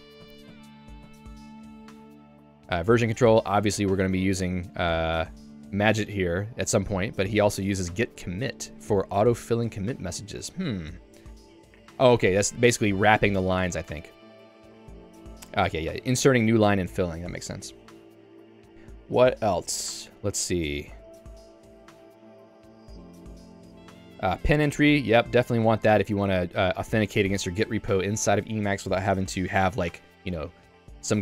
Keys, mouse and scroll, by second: 0.3 ctrl+u, 0.6 ctrl+u, 1.4 k, 1.9 Tab, 2.1 j, 2.9 Tab, 3.6 j, 5.1 ctrl+d, 5.6 ctrl+d, 6.4 ctrl+u, 6.9 ctrl+u, 7.9 j, 20.7 ctrl+d, 21.3 ctrl+d, 24.5 k, 26.4 j, 27.0 k, 27.6 j.